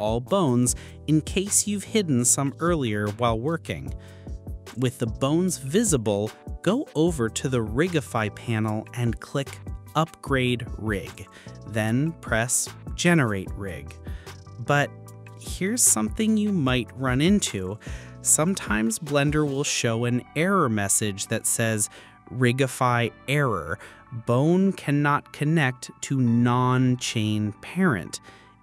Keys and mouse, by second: 5.6-7.1 drag, 16.2-18.2 drag, 24.1 click.